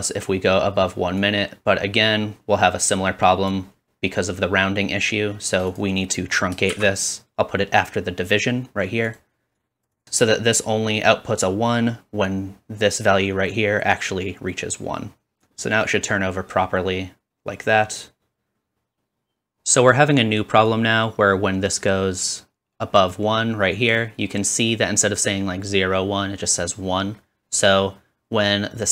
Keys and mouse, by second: 1.3-5.9 drag, 5.9 middle click, 6.0-9.2 drag, 6.7 shift+d, 9.2-9.5 middle drag, 9.5-28.9 drag.